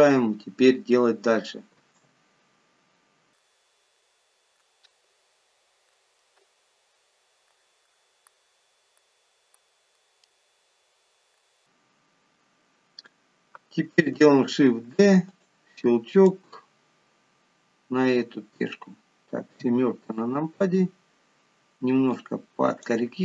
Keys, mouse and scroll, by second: 0.3-0.8 scroll down 3, 2.0 shift+a, 3.8 scroll down 2, 4.1 s, 5.3 g, 6.5 KP_7, 7.6 click, 8.0 click, 9.1 click, 9.8 middle click, 10.4 s, 11.9 middle click, 15.2 shift+d, 16.7 click, 20.0 KP_7, 21.1-21.4 scroll down 2, 22.5 click.